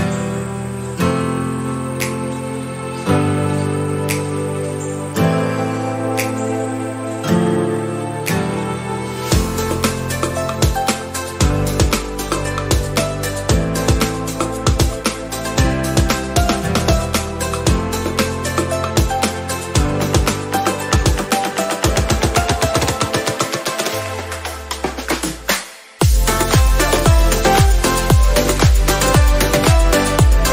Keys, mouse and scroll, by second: 1.1 click, 3.2 ctrl+d, 4.9-11.9 drag, 11.9 Up, 15.6 scroll up 1, 16.0-17.4 drag, 17.4-18.1 typing, 19.2 Return, 21.0-21.4 scroll up 1, 21.8 scroll down 1, 23.2 click, 23.9-25.5 scroll down 1, 25.5 click.